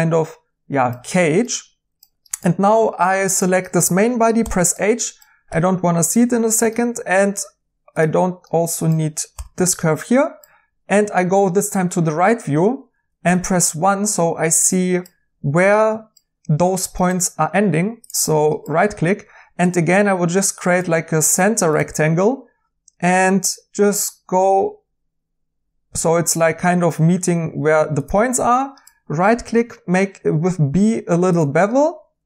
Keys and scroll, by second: 2.7 Tab, 4.4 h, 5.4 2, 9.3 h, 13.2 1, 29.5 b.